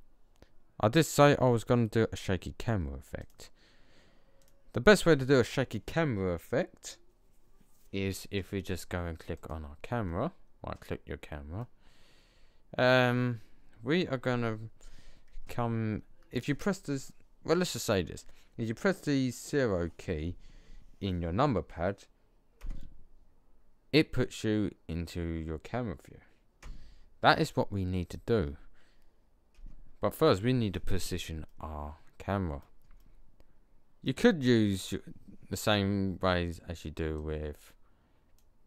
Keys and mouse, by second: 3.1-6.5 drag, 9.7-11.8 middle drag, 15.7-18.5 middle drag, 22.5 KP_0, 29.4 KP_0, 35.4-38.6 drag.